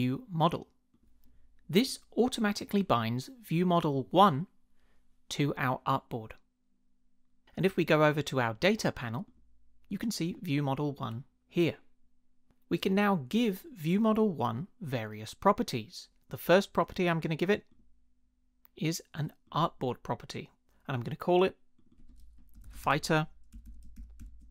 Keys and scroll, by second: 22.3-24.5 typing.